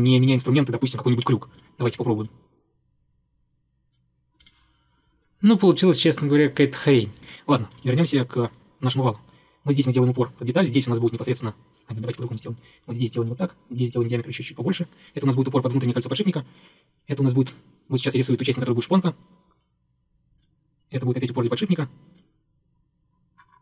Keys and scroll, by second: 3.4 Escape, 4.1 Escape, 7.9 Delete, 12.1 Escape, 12.2 Escape, 12.3 Escape.